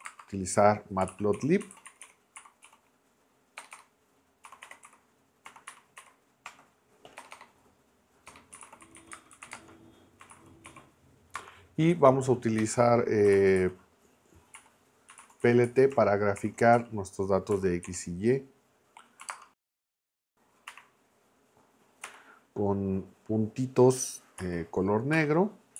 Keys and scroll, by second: 0.0-7.2 typing, 8.3-11.3 typing, 12.6 Return, 13.0-17.8 typing, 19.2 ', 19.3 space, 22.0 ., 24.4 k, 25.1 '.